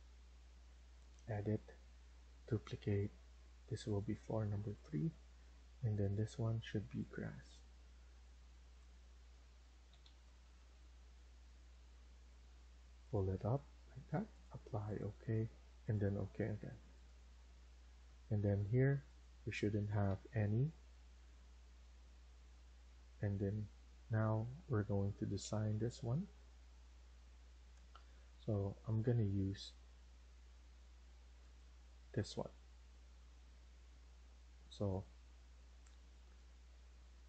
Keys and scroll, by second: 9.5-10.9 typing, 20.0 0, 20.2 Return.